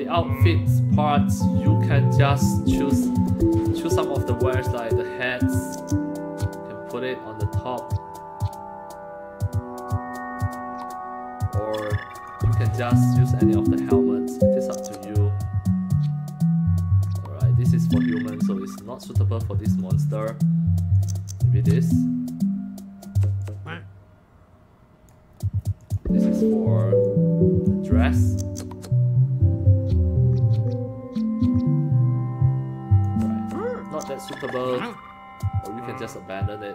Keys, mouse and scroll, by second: 0.4-1.6 drag, 2.5 click, 3.2 click, 5.6-11.6 drag, 12.1 click, 14.6-17.8 drag, 19.1 click, 20.9-23.0 drag, 23.4-25.1 drag, 25.8 click, 27.0 click, 28.2-33.0 drag, 33.8 click, 36.0 click.